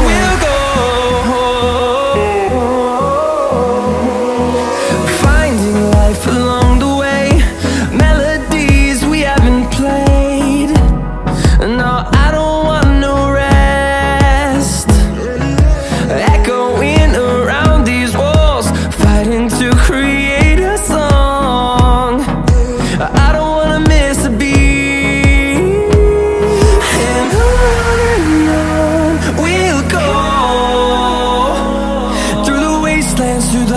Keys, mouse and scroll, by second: 0.0 click, 2.1 middle click, 2.9 middle click, 4.1 scroll up 1, 5.1 scroll up 1, 6.1 middle click, 7.4 middle click, 10.6 middle click, 11.1 middle click, 13.4-15.4 drag, 16.4 click, 18.7 click, 22.0 click, 23.2 click, 25.0 middle click, 26.8 middle click, 27.6 middle click, 29.3 middle click, 30.5 middle click, 32.8 Escape.